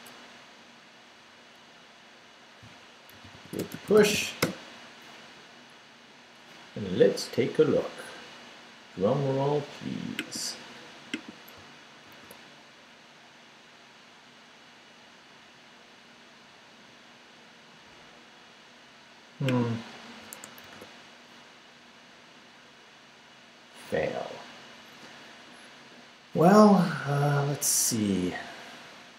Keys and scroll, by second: 0.6 Return, 2.9-4.6 typing, 12.1 super+r, 20.7 super+r.